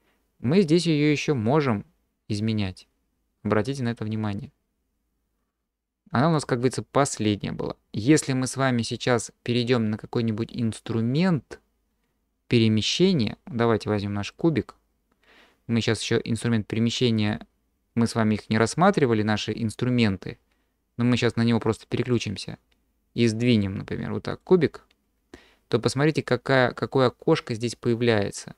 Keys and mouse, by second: 3.8-6.8 drag, 22.0 click, 23.6-24.4 drag.